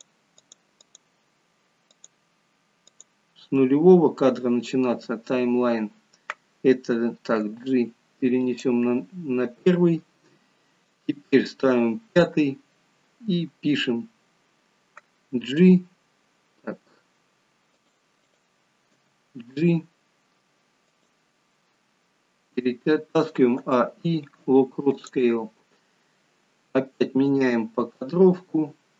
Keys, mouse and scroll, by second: 0.4 click, 10.9 click, 15.5 g, 18.4 click, 18.9 g, 23.5 a, 23.6 i, 27.3 click.